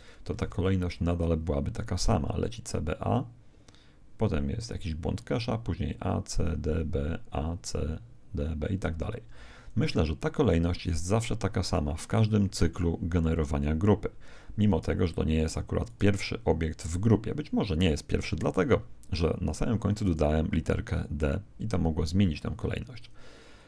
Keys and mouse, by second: 0.4 alt+a, 9.1 Escape, 15.9 right click, 20.0 right click.